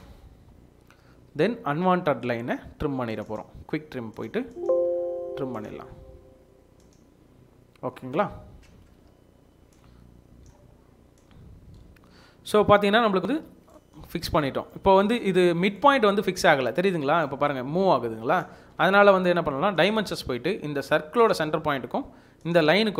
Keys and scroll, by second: 1.1 Return, 1.3 Escape, 8.8 Escape, 9.7 Escape, 13.4 Escape, 18.6 Escape.